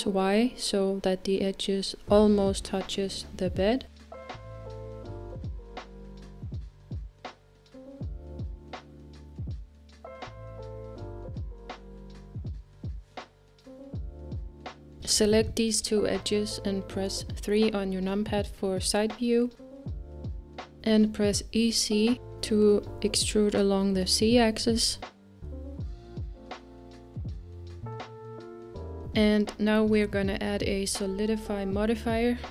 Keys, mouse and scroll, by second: 10.1-12.0 middle drag, 12.2 Tab, 13.5-14.8 drag, 15.3-16.3 middle drag, 16.3 shift+click, 17.8 KP_3, 18.6-19.2 scroll up 2, 19.2-20.3 scroll up 1, 20.3-20.8 scroll up 1, 20.8 e, 27.1-30.1 middle drag, 30.1 KP_3.